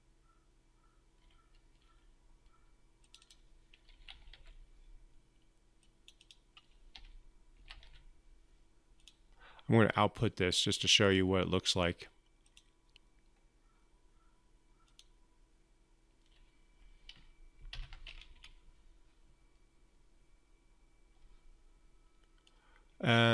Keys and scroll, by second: 17.5 ctrl+F5.